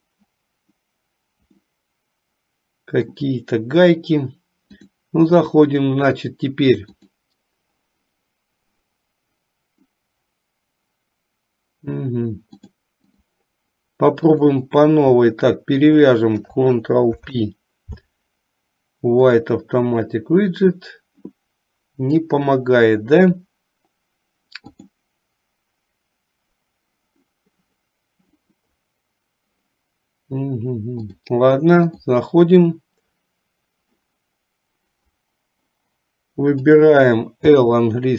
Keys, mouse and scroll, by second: 1.8-3.3 middle drag, 4.9-7.4 drag, 12.8 click, 14.3 click, 15.9 shift+click, 17.2 ctrl+p, 24.8 click, 31.2 click, 36.7 click, 37.7 l.